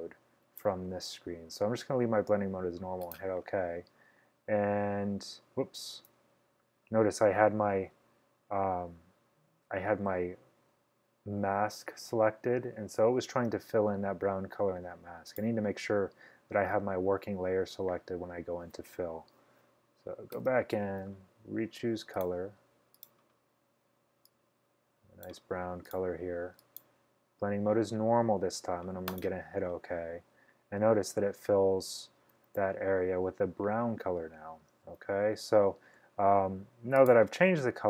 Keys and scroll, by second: 6.1 super+z, 20.4 shift+F5, 32.6 super+d.